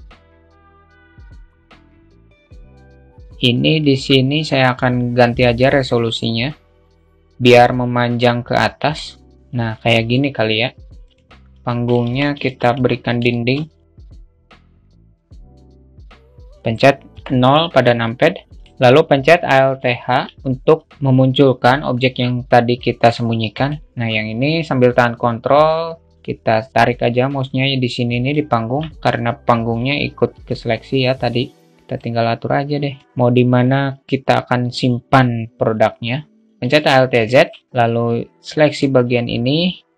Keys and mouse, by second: 0.0 q, 0.1 alt+middle click, 1.0-1.7 alt+shift+middle drag, 1.7 alt+shift+middle click, 2.0 alt+middle click, 5.9-8.7 drag, 10.8 click, 11.4 middle click, 11.7 Tab, 12.1 2, 12.3 click, 13.0 alt+shift+middle click, 14.7 e, 16.8 KP_0, 18.6 q, 19.9 alt+h, 22.4-23.5 drag, 23.6 ctrl+z, 26.1-28.1 ctrl+drag, 30.1-31.1 drag, 31.6 click, 32.7 click, 36.5 alt+z, 37.0 alt+shift+middle click, 37.6 a, 37.7-38.5 drag.